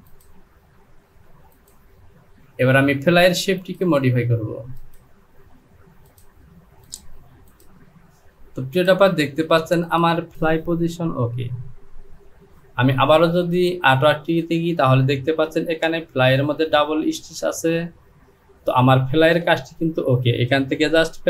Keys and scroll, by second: 11.0 Home.